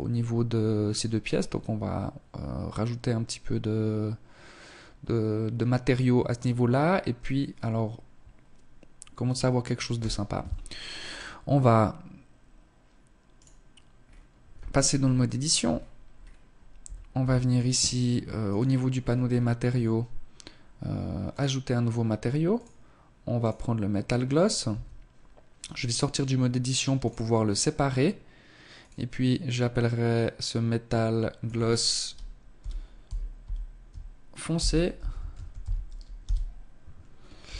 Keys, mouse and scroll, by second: 8.9 Escape, 10.0 click, 11.3 Escape, 11.3 click, 12.4 right click, 13.0 scroll up 2, 13.7 Tab, 14.1 shift+middle click, 14.7-15.4 scroll up 4, 15.7 a, 16.1 a, 17.4 click, 17.9-18.7 scroll up 7, 20.2 click, 21.4 click, 23.6 Tab, 25.9 click, 27.7 click, 36.3 Tab, 36.9-37.4 scroll up 3, 37.4 middle click.